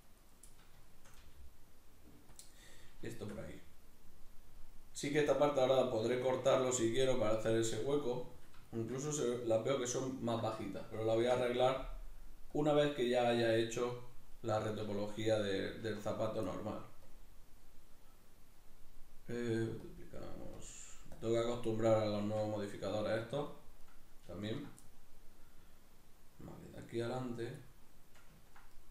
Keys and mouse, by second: 0.1 click, 0.2 right click, 0.5-2.4 middle drag, 1.2 g, 2.4 click, 2.6-12.9 middle drag, 11.2 ctrl+r, 12.9 right click, 13.3-17.1 middle drag, 15.9 Tab, 17.1-22.9 drag, 22.2 Tab, 22.9 middle click, 23.8 right click, 24.4 ctrl+right click, 24.8-28.9 middle drag.